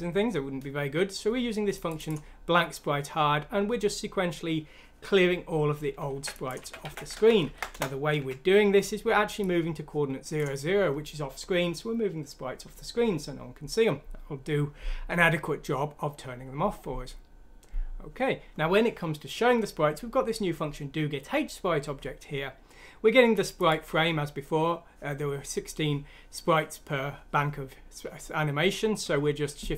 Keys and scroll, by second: 6.1 ctrl+c, 6.6 ctrl+f, 6.8-8.8 typing, 7.7 Return.